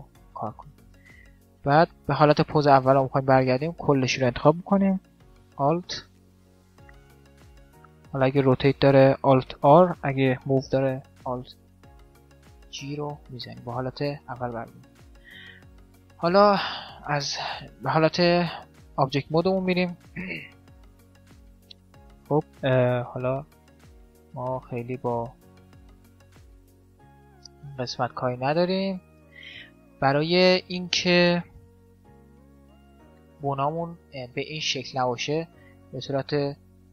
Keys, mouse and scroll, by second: 0.2-4.2 middle drag, 3.2 a, 3.4 a, 5.5 alt+r, 5.8 alt+g, 8.4 alt+r, 10.4 alt+g, 11.2 middle click, 14.2 middle click, 15.4-17.1 right drag, 16.0 Tab, 19.4-21.3 middle drag, 20.2 z, 21.3 right click, 21.8 middle click, 22.6 r, 24.0 right click, 25.8 right click, 26.1 a, 26.4 middle click, 26.8-28.2 drag, 26.8-29.6 right drag, 29.2 middle click, 29.4 middle click, 29.6-30.6 drag, 29.6-30.7 middle drag, 32.0 t, 32.4-35.6 middle drag.